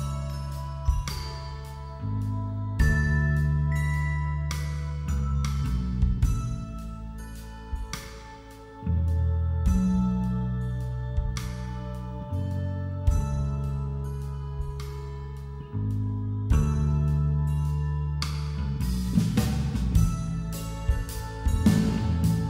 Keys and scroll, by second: 17.4 [, 19.3 [.